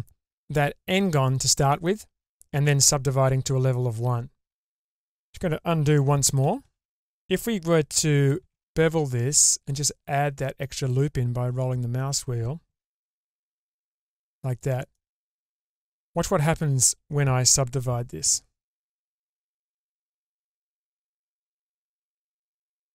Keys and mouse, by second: 5.0 middle click, 6.5 ctrl+z, 6.7 ctrl+z, 6.9 ctrl+z, 8.3 ctrl+b, 14.9-16.9 middle drag, 19.2 Tab, 20.7-22.1 drag, 22.7 Tab.